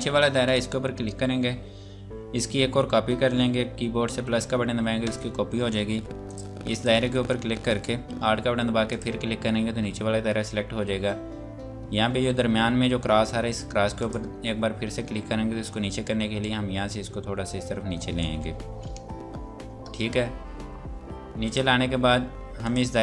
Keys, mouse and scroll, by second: 4.9 KP_Add, 6.3 click, 8.9 alt+click, 13.8 click, 21.4 click.